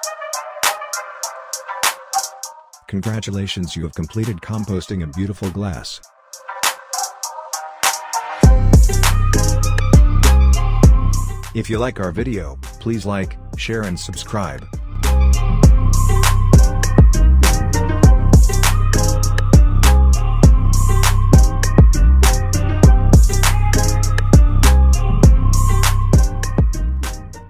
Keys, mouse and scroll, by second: 0.3-0.6 scroll up 1, 0.7 alt+click, 1.7 scroll up 1, 2.4 alt+middle click, 3.3 scroll up 1, 3.8-5.2 alt+middle drag, 5.2 click, 16.4 click.